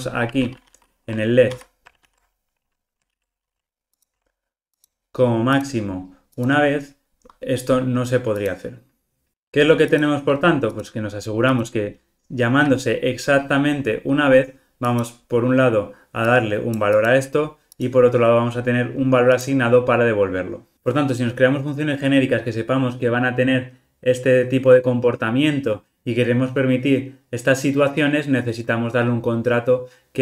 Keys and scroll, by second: 1.5 super+[, 3.1 super+z, 3.9 super+b, 7.2 alt+super+[, 10.0 super+b, 13.4 alt+super+[.